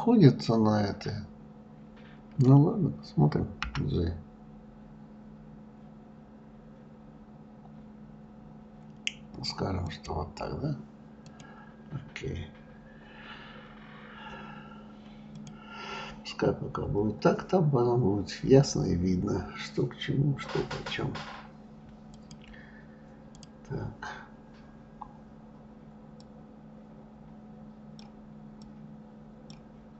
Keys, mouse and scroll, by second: 11.7-12.7 drag, 12.7-14.0 scroll down 1, 15.7-17.5 drag, 22.6-24.0 drag, 26.7-29.9 drag.